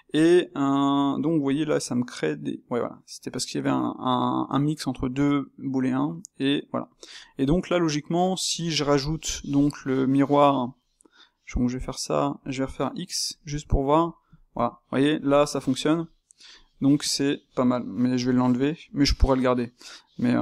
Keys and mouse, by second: 0.0 Tab, 0.3-1.6 middle drag, 1.6 g, 7.2-8.9 middle drag, 8.9 click, 9.4-11.8 ctrl+shift+middle drag, 11.8 space, 14.3-20.0 shift+middle drag, 20.3-20.4 ctrl+shift+middle drag.